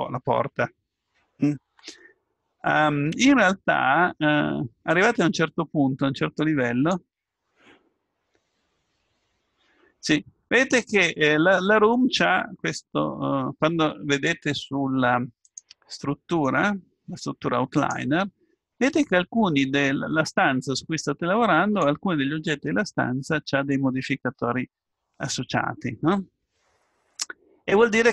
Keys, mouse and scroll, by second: 5.0-7.4 drag, 15.4-23.5 drag.